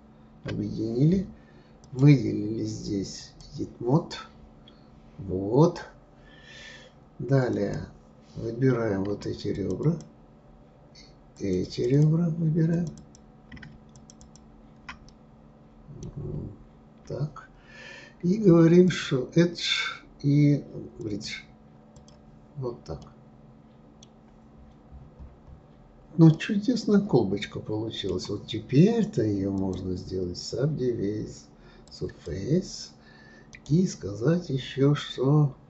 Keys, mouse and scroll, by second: 1.8-4.3 drag, 4.3-6.8 scroll up 4, 6.8-7.5 scroll up 1, 7.5 click, 9.5 shift+click, 9.8 shift+click, 11.4 shift+click, 11.6 shift+click, 11.9 shift+click, 12.7 shift+click, 12.9 shift+click, 13.9 shift+click, 14.2 shift+click, 15.1-18.1 middle drag, 18.9-22.1 drag, 23.0-24.6 middle drag, 24.6-26.3 scroll down 12, 26.3-29.4 middle drag, 29.6-32.2 drag.